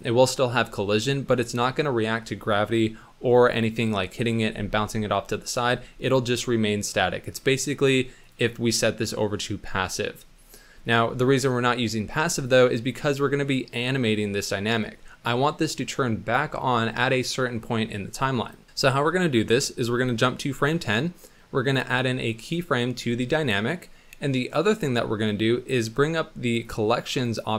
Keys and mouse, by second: 8.2-10.9 drag, 12.4 click, 18.5 click, 19.7 click, 22.4 click, 26.5 click, 27.2 click.